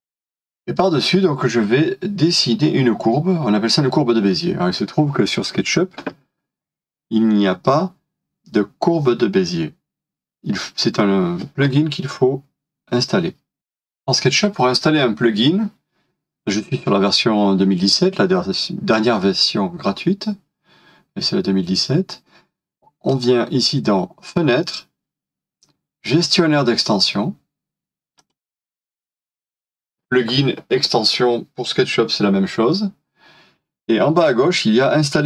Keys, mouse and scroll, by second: 0.6-0.9 shift+scroll down 2, 13.6 €, 15.1 typing.